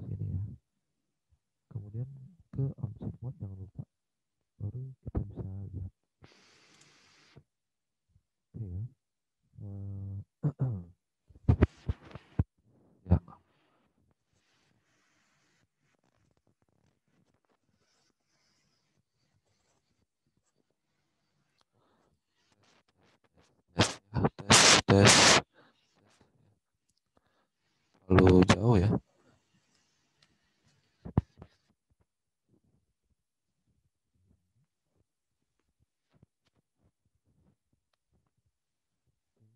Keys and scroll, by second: 0.3 space.